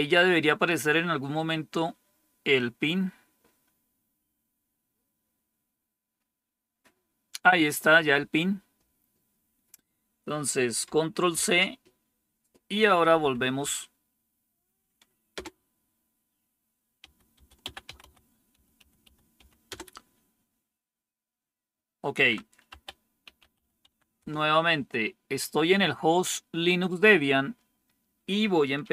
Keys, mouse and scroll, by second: 11.3 ctrl+c, 13.1 Up, 13.5 Up, 15.2 Return, 16.7-19.8 typing, 22.6-24.0 typing, 24.1 Return.